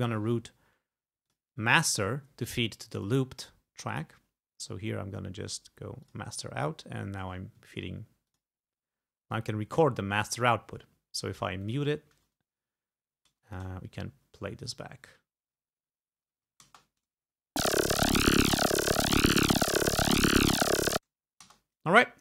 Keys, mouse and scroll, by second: 1.3 click, 3.0 click, 4.0 click, 6.1 click, 8.3 click, 11.7 click, 13.5 click, 14.8 shift+click, 16.7 shift+space, 21.5 space.